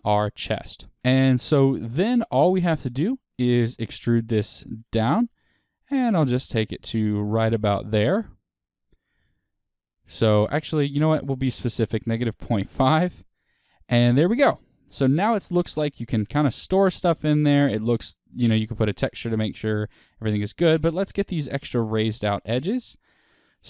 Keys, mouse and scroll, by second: 0.9 ctrl+click, 1.2-4.7 middle drag, 4.7 e, 7.1 click, 7.4-12.9 middle drag, 12.9-14.3 drag, 14.0-14.3 scroll, 14.3-20.4 middle drag, 14.9 Tab, 15.7-16.0 scroll up 2, 17.3-17.7 scroll up 2, 20.0-20.4 scroll down 2, 20.8 Tab, 20.8 middle click, 22.4 click.